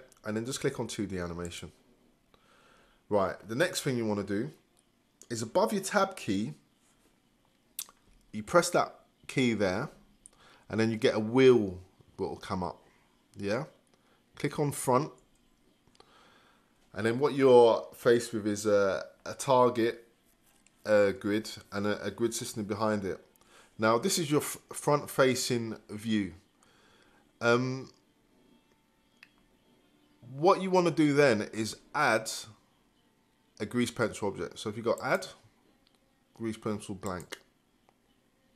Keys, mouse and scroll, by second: 30.8-38.5 drag.